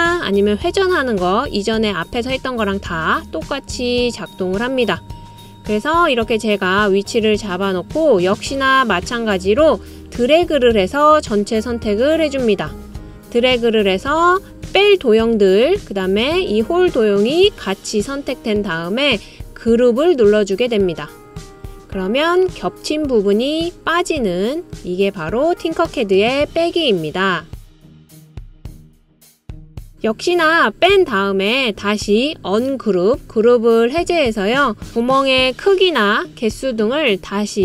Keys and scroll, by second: 36.7 super+c, 36.8 super+v.